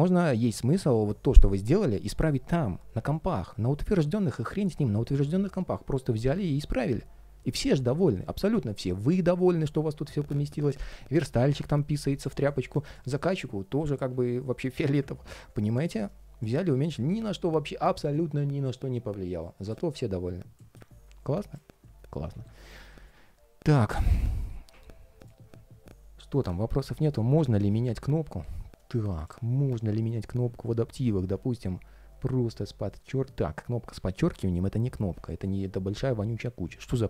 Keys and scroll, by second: 22.0 super+s.